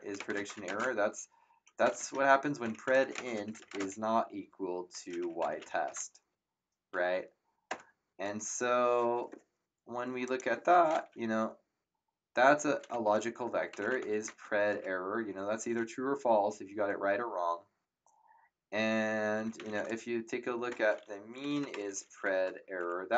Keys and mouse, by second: 0.0-6.2 typing, 7.7 Return, 7.7 KP_Enter, 10.2 click, 13.1-14.6 typing, 14.7 Return, 19.2-22.5 typing, 22.8 Return, 22.8 KP_Enter.